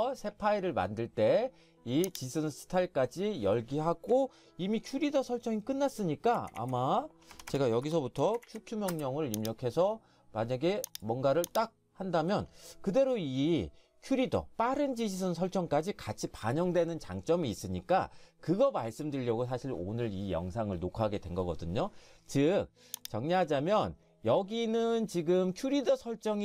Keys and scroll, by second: 6.4 typing, 7.3 Escape, 7.5 Escape, 8.2-10.1 typing.